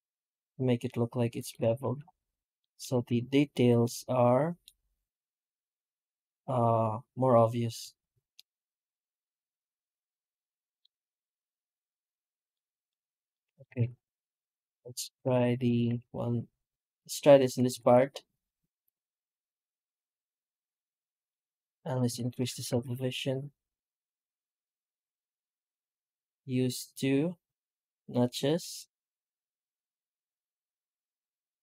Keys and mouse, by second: 1.7 Tab, 2.4 alt+middle drag, 2.8 alt+a, 3.7-4.5 middle drag, 6.1-7.7 middle drag, 8.2-9.1 middle drag, 9.2 middle click, 9.5 middle click, 9.6 middle drag, 9.9 middle drag, 10.2-10.7 middle drag, 12.4-12.7 middle drag, 13.2 middle drag, 13.6 alt+a, 14.2 right click, 14.4 Tab, 15.1 alt+a, 15.5 right click, 15.7 q, 17.3 Tab, 17.6 shift+q, 21.1 shift+middle drag, 21.6 middle click, 21.9 F9.